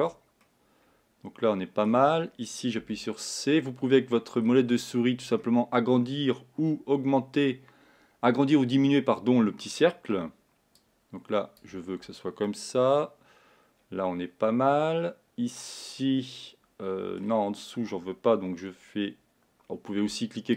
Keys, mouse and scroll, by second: 0.6-3.2 middle drag, 3.2 c, 12.7-15.6 middle drag.